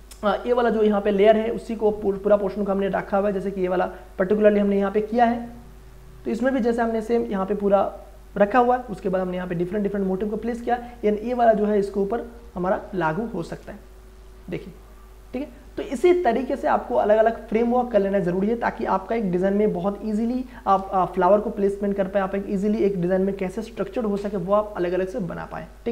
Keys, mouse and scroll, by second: 3.3 click, 5.8 click, 10.8-18.3 drag.